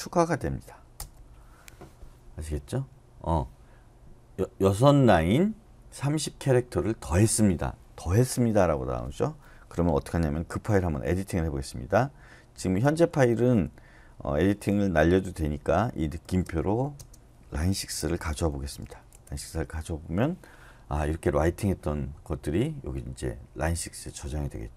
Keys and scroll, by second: 0.0-0.4 typing, 1.0 Return, 6.0 typing, 12.3-13.4 typing, 15.9-18.7 typing, 19.1 Return.